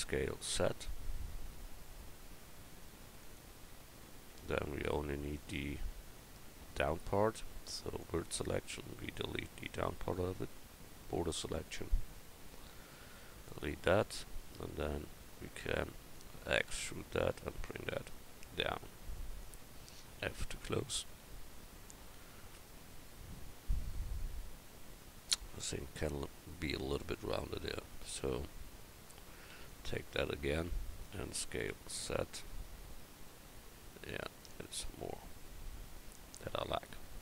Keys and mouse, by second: 0.0 s, 4.3 Tab, 7.9-9.1 drag, 9.1 a, 10.5 b, 13.0 x, 14.4-15.6 drag, 16.7 e, 20.2 f, 21.1 a, 27.6 a, 28.1 a, 29.5 b, 31.1 s, 34.8 Tab.